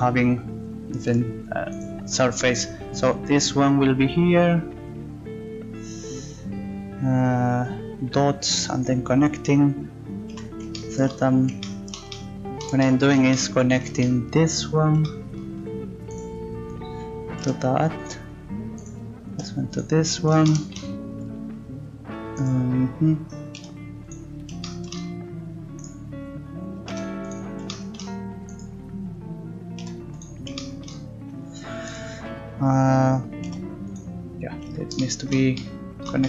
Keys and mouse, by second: 1.5 click, 1.7-5.6 right drag, 10.3 z, 16.1-18.0 right drag, 17.4 g, 18.8-20.6 right drag, 19.3 g, 22.4-24.0 right drag, 23.5 g, 25.8 right click, 26.9 g, 28.5-29.7 right drag, 29.8 g, 31.9 right click, 33.0 right click, 33.5 g.